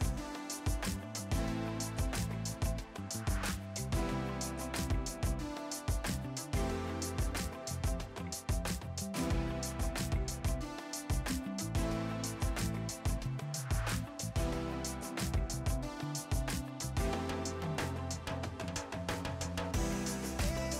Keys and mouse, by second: 0.3 click, 0.5 right click, 3.2 click, 3.8 right click, 4.1 click, 5.8 ctrl+click, 6.2 Delete, 6.6 click, 6.8 Escape, 6.9 click, 7.3 right click, 7.5 click, 8.8 ctrl+click, 9.1 Delete, 9.4 click, 11.6 Escape, 11.6 click, 12.3 Delete, 12.4 click, 12.6 Escape, 12.8 click, 13.3 Escape, 13.9 click, 16.5 click, 19.1 click, 20.2 click.